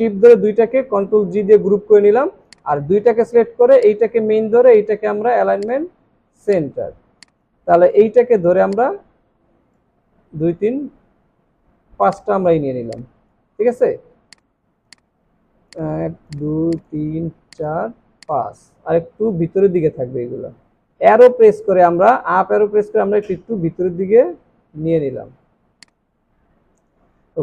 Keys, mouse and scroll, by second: 1.6 alt+scroll down 1, 6.9 alt+scroll down 2, 7.2 space, 7.7 alt+scroll up 2, 10.3 ctrl+d, 12.6 alt+scroll, 12.7 alt+scroll down 1, 12.9 space, 16.3 shift+click, 19.7 Up, 21.7 Up, 23.5 Down, 23.9 Down, 24.1 Down, 25.1 Up, 27.0 alt+scroll up 1.